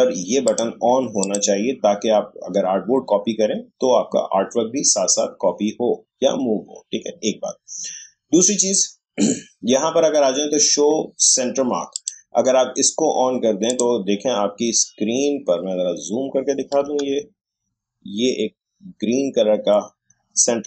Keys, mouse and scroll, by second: 0.4 click, 11.9 click, 15.0 alt+scroll up 1, 16.5 alt+scroll down 1, 17.3 shift+scroll up 1.